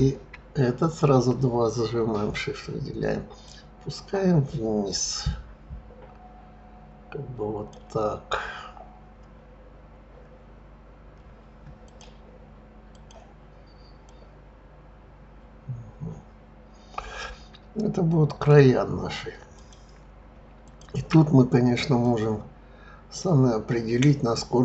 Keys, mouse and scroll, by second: 0.8 shift+click, 3.4 click, 11.8 click, 12.9 click, 14.0 click, 19.5 click, 20.6 shift+click, 22.0 click.